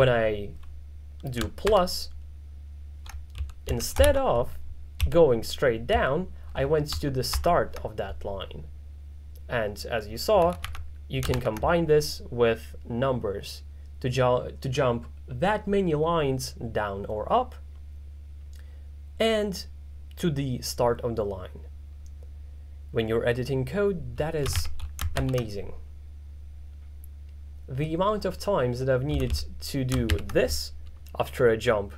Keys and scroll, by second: 1.7 shift+=, 3.2-5.9 typing, 7.4 shift+=, 10.2-11.4 typing, 24.3-25.2 typing, 29.2 k, 29.4 k, 30.1 shift+6.